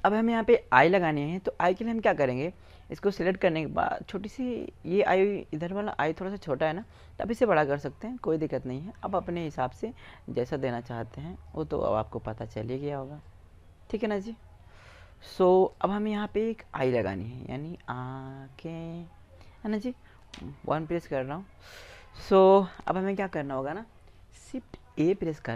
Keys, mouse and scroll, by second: 1.4 right click, 2.0-5.2 middle drag, 6.1 click, 6.6 click, 10.1-11.7 drag, 11.7-13.7 right drag, 12.6-13.7 drag, 13.7 middle click, 13.8 click, 15.1-16.1 drag, 16.1-17.3 middle drag, 19.7 KP_1, 24.5 shift+a.